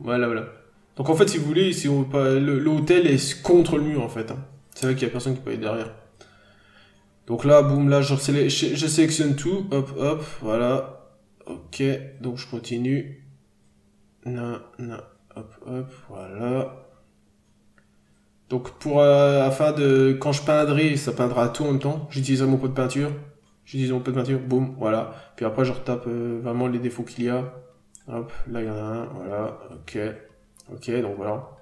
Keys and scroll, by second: 0.1 n, 0.3 scroll down 1, 1.3 scroll up 1, 1.6 b, 2.8-3.3 scroll down 1, 3.9-4.2 scroll up 1, 4.2 p, 5.3 n, 8.4 n, 10.1 n, 12.1 n, 16.8 n, 18.4 n, 20.6 n, 23.1 scroll down 1, 23.3 n, 25.1 scroll up 1, 25.2-30.3 typing, 30.4-30.8 scroll down 1.